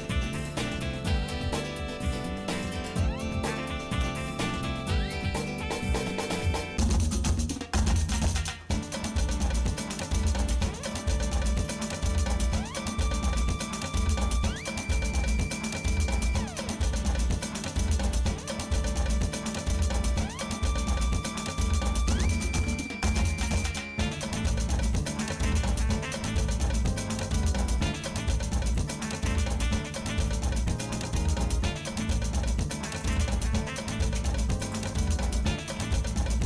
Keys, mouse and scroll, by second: 1.2 alt+m, 3.3 shift+middle click, 4.1 middle click, 4.9 shift+middle click, 5.4-5.8 scroll up 2, 6.1 ctrl+Tab, 8.1 alt+shift+click, 9.0 scroll down 2, 9.1 scroll up 1, 9.2 scroll down 1, 10.5 ctrl+x, 11.2 shift+middle click, 11.8 middle click, 12.6 shift+middle click, 13.3 shift+middle click, 13.9 shift+middle click, 14.9 middle click, 15.7 shift+middle click, 16.5 middle click, 17.1 middle click, 17.9 middle click, 18.9 middle click, 19.3 middle click, 19.9 middle click, 20.6-21.2 scroll up 3, 21.5 click, 22.5 ctrl+Tab, 23.5 click, 24.9 g, 29.3 shift+middle click, 31.2 s, 34.2 e, 35.8 s.